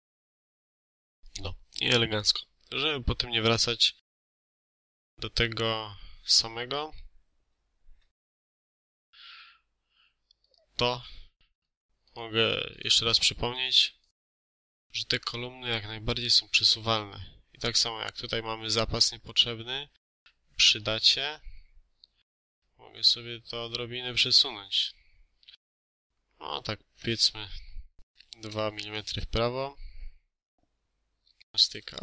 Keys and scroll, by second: 27.8 2, 28.3 Return, 31.8 ctrl+z.